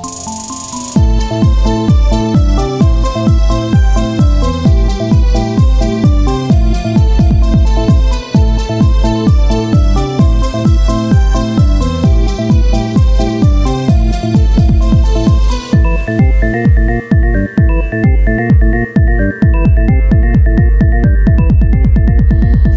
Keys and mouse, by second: 0.4-1.5 right drag, 1.5-10.5 drag, 8.2 Tab, 8.9 ctrl+Tab, 11.0-12.3 drag, 12.3 s, 16.7 e, 18.2 s, 20.6 Tab.